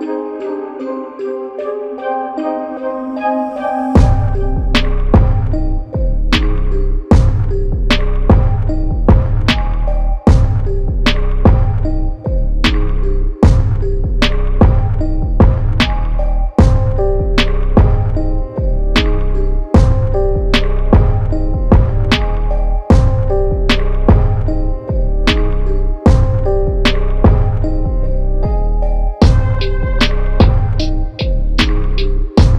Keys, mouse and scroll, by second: 4.0 click, 4.4 KP_1, 4.7 KP_8, 5.2 KP_0, 5.6 Tab, 6.0 KP_0, 7.3 click, 21.9 click.